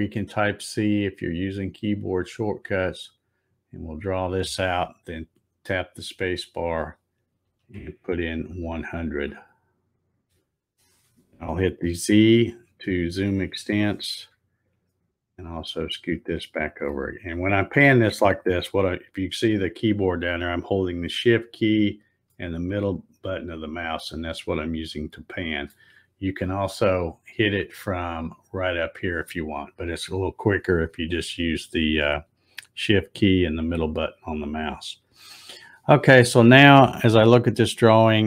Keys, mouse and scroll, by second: 1.9-5.7 drag, 5.4 space, 12.5 z, 14.8-16.9 shift+middle drag, 22.3-25.6 shift+middle drag.